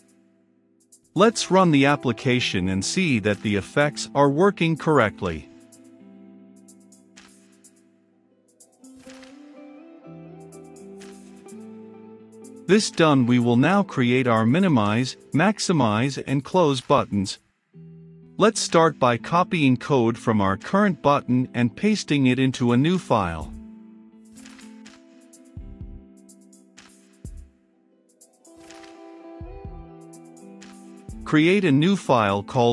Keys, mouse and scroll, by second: 0.9 ctrl+s, 1.9-12.8 drag, 12.8-15.1 middle drag, 15.1-17.9 drag, 17.9-19.2 middle drag, 19.2 click, 19.5-19.8 scroll, 20.0 middle click, 21.0 right click, 21.9 click, 22.2 middle click, 23.1 click, 23.7-25.4 right drag, 25.4-29.6 drag, 29.7-32.3 typing.